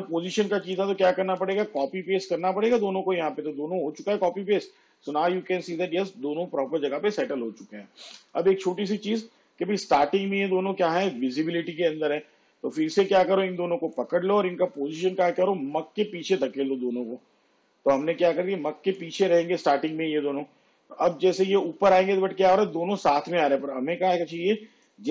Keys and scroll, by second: 1.4 ctrl+c, 1.7 ctrl+v.